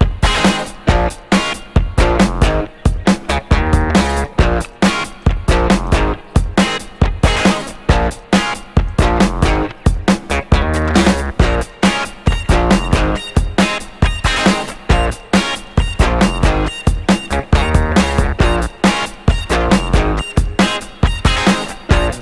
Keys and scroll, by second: 0.5 Escape, 1.6 0, 2.5 Return, 3.2 ., 3.4 Return, 6.5 3, 6.7 Return, 9.1 3.